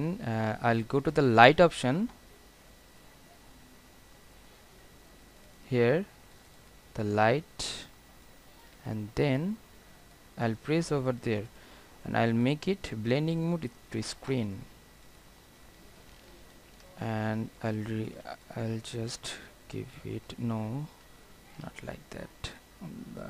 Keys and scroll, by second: 16.8 ctrl+t.